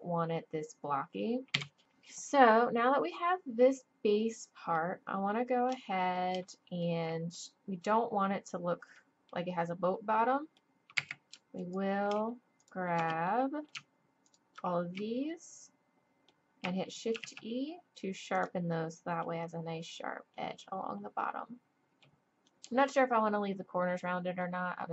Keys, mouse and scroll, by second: 1.5 z, 2.1-3.9 drag, 5.4-8.7 drag, 8.9 click, 11.0 a, 14.5-17.1 drag, 15.4 middle click, 17.1 shift+e, 18.7 click, 22.7-24.9 middle drag.